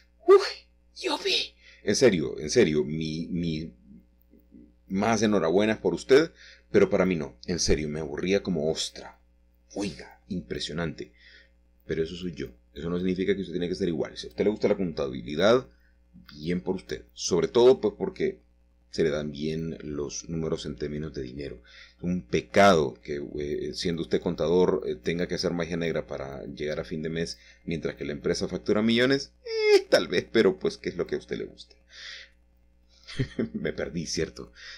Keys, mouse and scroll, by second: 0.0 click, 0.7 Tab, 2.0 click, 2.8 Tab, 4.7 u, 5.3 click, 6.4 click, 7.7 a, 10.8-11.9 drag, 12.0 middle click, 12.9 shift+middle click, 13.5 click, 14.8 Tab, 17.2 u, 18.3 click, 19.4 click, 20.6 typing, 21.9 typing, 24.4 click, 25.0 Tab, 25.6 click, 25.9 Tab, 26.4 a, 28.3 u, 29.3 click, 30.4 click, 31.7-32.4 typing, 34.5 click.